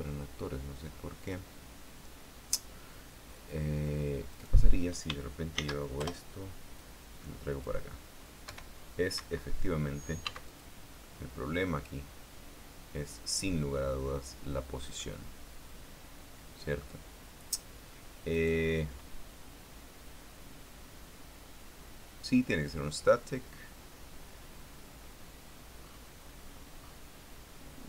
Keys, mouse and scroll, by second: 0.5 right click, 1.9 click, 5.0 right click, 6.2 shift+d, 6.7 Return, 7.5-8.5 drag, 8.5 middle click, 9.2 p, 9.9 Escape, 11.0 x, 11.2 click, 11.8-15.0 middle drag, 15.7-17.7 middle drag, 19.0 right click, 26.5-26.8 scroll up 1, 27.1-27.5 scroll down 1, 27.5 scroll up 1.